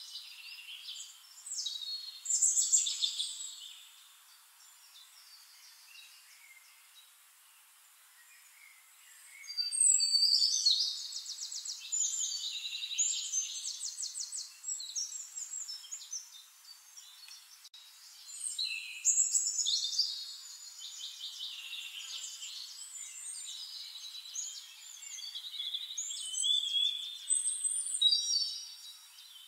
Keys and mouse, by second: 0.5 click, 1.4 click, 1.7 drag, 2.3 middle click, 3.3 click, 4.3 click, 5.2 click, 5.8 shift+click, 6.6 click, 7.4 middle click, 8.1 click, 8.5 click, 8.9 middle click, 9.5 shift+-, 11.5 middle click, 12.9-13.9 drag, 14.2 middle click, 15.0 shift+click, 15.7 shift+click, 17.2-19.1 shift+drag, 19.4 shift+click, 20.7 shift+-, 21.7 click, 21.9 click, 22.5 click, 22.9 ctrl+click, 24.0 ctrl+middle click, 24.7-26.1 drag, 26.7 click, 27.8 drag, 28.1 shift+click.